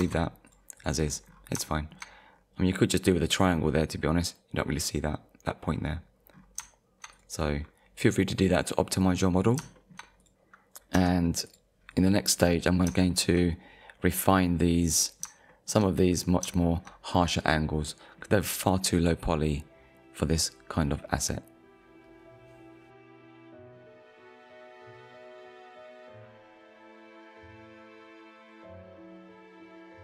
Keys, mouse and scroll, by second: 0.0 Tab, 0.5 click, 0.8 click, 1.0 scroll down 1, 1.8 shift+middle click, 2.3-2.7 scroll up 1, 4.0 scroll up 1, 5.6-6.1 scroll down 1, 6.3-6.7 scroll down 2, 7.1 click, 8.6 click, 9.1 scroll down 1, 9.8 shift+middle click, 10.2 click, 10.5 scroll down 1, 11.0 Tab, 11.5 click, 12.2 middle click, 13.1 shift+middle click, 15.0 middle click, 15.5 shift+middle click, 16.5 shift+middle click, 17.9 middle click, 18.6-19.0 scroll up 1, 20.9 middle click.